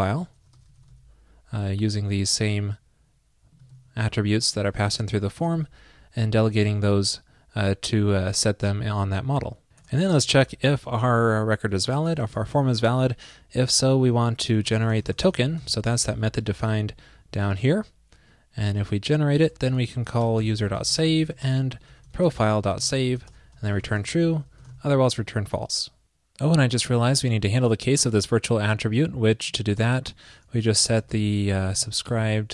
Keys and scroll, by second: 3.7 super+c, 4.9 shift+super+Right, 5.5 super+v, 9.9 super+Return, 16.1 super+a, 21.5 super+Return.